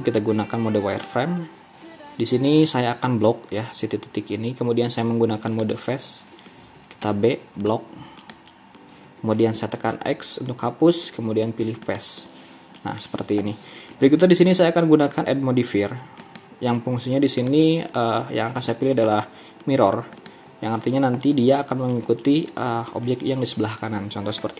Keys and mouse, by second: 7.1 b, 10.0 x.